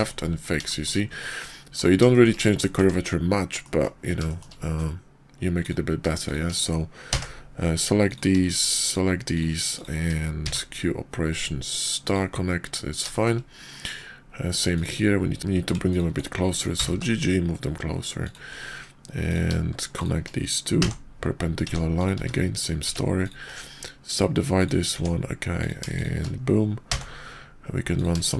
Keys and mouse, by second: 0.6 shift+click, 1.3-1.8 drag, 2.0 shift+drag, 2.8 Tab, 3.5 drag, 4.3 shift+click, 5.4 click, 6.2 shift+click, 6.9 j, 7.9 click, 8.5 shift+click, 8.8 shift+click, 9.7 shift+click, 10.3 q, 13.1 shift+drag, 14.7 click, 15.4 ctrl+z, 16.6 g, 19.3 click, 20.0 shift+click, 20.7 j, 21.6 Tab, 21.9 click, 22.1 x, 22.8 Tab, 23.1 click, 23.5-24.7 drag, 24.9 Tab, 25.6 click, 25.9 shift+click, 26.8 j, 27.9 click.